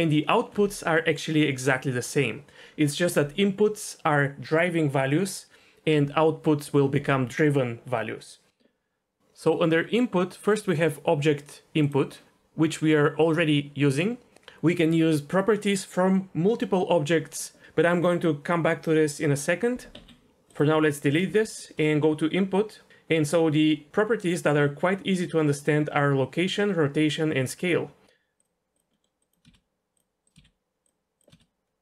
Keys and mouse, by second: 19.9 x, 20.3 ctrl+z, 20.5 click, 20.7 x, 21.4 shift+a, 29.0 middle click, 29.3 click, 29.5 shift+a, 30.4 shift+a, 31.3 shift+a.